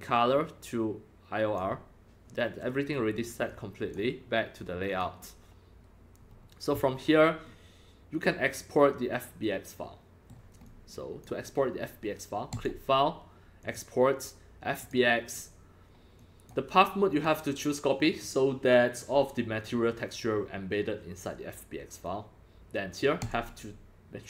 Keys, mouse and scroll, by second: 0.1-1.6 drag, 3.5 click, 4.9 click, 5.9-6.2 scroll down 2, 6.3 scroll up 3, 6.9 scroll down 2, 9.1-11.4 middle drag, 10.6 click, 11.4-12.6 drag, 13.6 click, 14.8 click, 15.0 Up, 16.2 click, 17.1 click, 18.1 click, 19.6 click, 23.2 click.